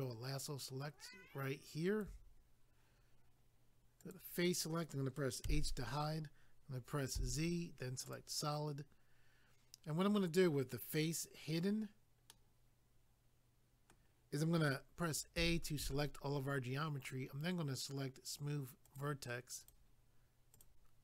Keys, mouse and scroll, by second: 4.0 click, 4.1 click, 5.4 h, 8.1 click, 8.1 click, 12.3 middle click, 15.4 a, 18.8 click, 19.0 click, 19.6 click, 19.7 click, 20.5 click, 20.6 click.